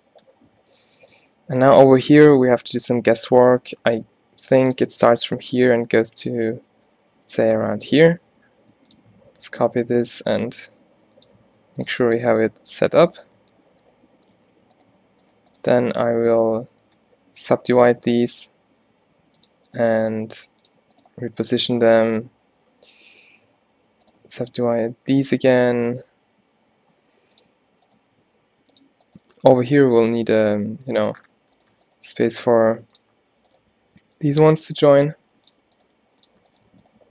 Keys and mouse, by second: 3.7 shift+d, 4.5 click, 5.0 e, 8.4 shift+d, 9.2 e, 16.5 z, 17.1 z, 17.5 alt+w, 18.4 g, 19.4-21.0 drag, 20.2 g, 22.2 alt+w, 23.2 ctrl+z, 24.6 alt+w, 25.2 g, 28.2 g, 29.3 g, 30.8 x, 31.7 right click, 32.4 x, 33.7 e, 35.0 e, 35.9 g.